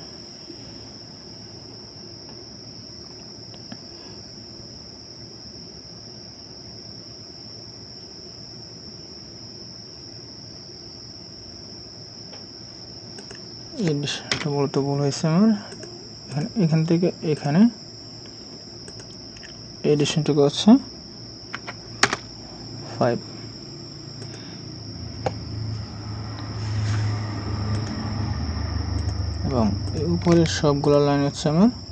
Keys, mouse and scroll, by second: 14.3 Delete, 21.5 5, 22.0 Return, 27.8 right click, 30.8 ctrl+click.